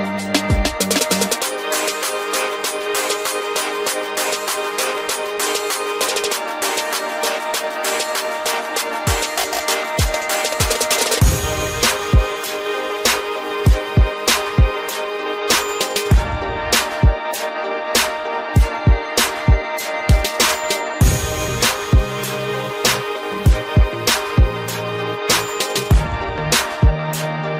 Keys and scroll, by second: 24.5 ctrl+t.